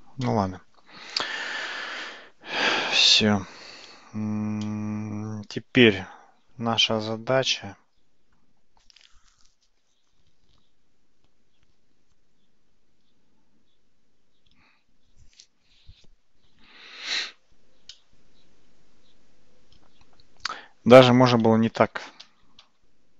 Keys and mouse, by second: 0.3-2.0 middle drag, 4.7-17.2 middle drag, 18.0-20.6 middle drag, 21.5 ctrl+z, 21.8 ctrl+z, 22.3 ctrl+z, 22.7 ctrl+z.